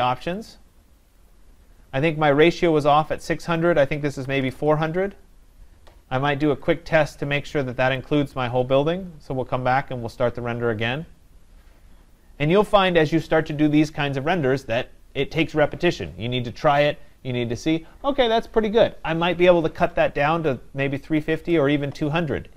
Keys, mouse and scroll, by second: 0.4 click, 1.3 click, 3.6 click, 4.2 typing, 6.8 click, 8.0 click, 21.4 click.